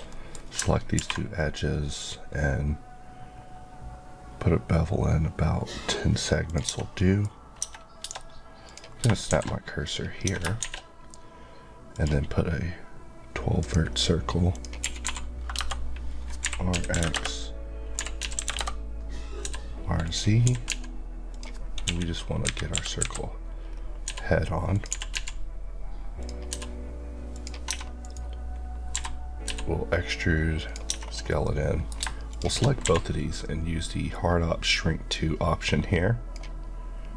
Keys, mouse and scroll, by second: 0.1 middle click, 0.3-0.9 scroll up 2, 1.0 ctrl+b, 1.7 scroll up 1, 4.7-6.4 scroll up 1, 6.4 click, 6.6 Tab, 7.0 middle click, 7.6 Tab, 8.6 click, 9.3 shift+s, 9.9 click, 10.2 Tab, 10.6 shift+a, 11.9 click, 14.8 typing, 15.5 KP_Enter, 16.7 typing, 17.1 KP_Enter, 18.1-19.4 typing, 18.5 KP_Enter, 20.0 click, 20.5 g, 20.7 x, 21.3 click, 21.8 KP_1, 22.4 KP_3, 23.0 KP_Decimal, 23.7-24.0 scroll down 1, 24.0-25.1 typing, 24.7 click, 26.2 click, 26.5 s, 27.3 click, 27.7 Tab, 28.0 right click, 28.9-29.5 typing, 30.6 click, 31.1 scroll down 1, 31.4 middle click, 32.3 shift+click, 32.8 q, 34.7 click.